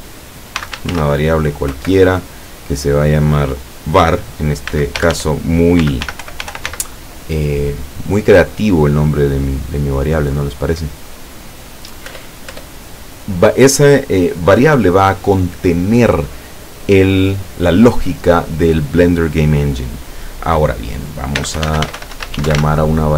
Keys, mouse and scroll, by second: 0.6 v, 0.8 a, 0.9 r, 1.7 =, 4.7-6.7 typing, 12.2 Return, 21.4-22.6 typing.